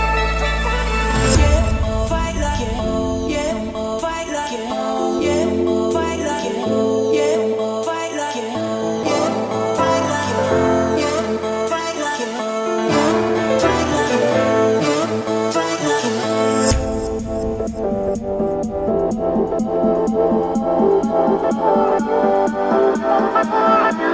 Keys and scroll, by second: 0.1 2, 0.5 Return, 1.5 Escape, 3.1 Escape, 4.3 Escape, 5.6-13.2 typing, 13.9 Escape, 14.7 Escape, 15.6 o, 17.4 Escape, 19.3 Escape.